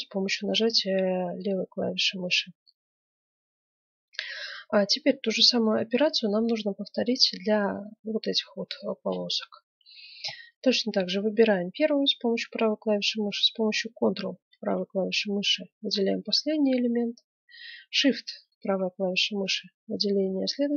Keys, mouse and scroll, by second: 7.6-9.3 right drag, 9.3-11.0 middle drag, 11.2 middle click, 14.4-16.2 right drag, 16.4-18.1 middle drag, 18.4-20.2 right drag.